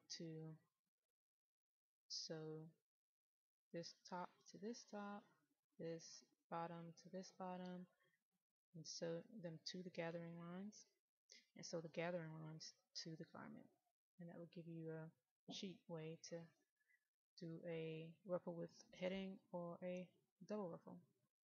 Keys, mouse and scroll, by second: 3.5 click, 15.2-15.6 scroll up 1, 15.6 middle click, 20.8 click.